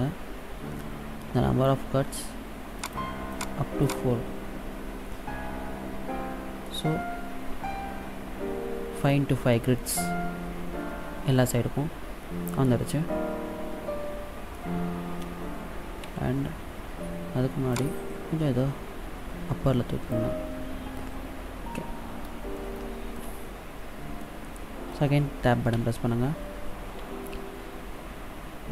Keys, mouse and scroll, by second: 3.0 click, 3.6 click, 4.0 click, 6.8 middle click, 9.8 middle click, 16.3 Tab, 17.9 click, 22.7 shift+middle click, 23.6-24.4 scroll up 3, 24.4 middle click, 25.9 Tab.